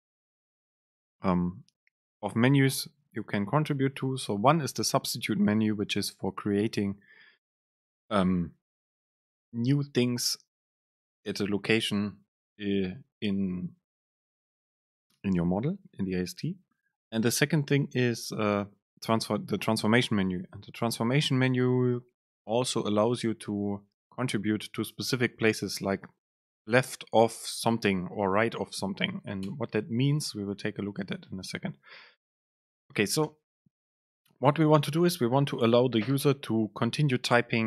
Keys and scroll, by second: 31.2 super+space.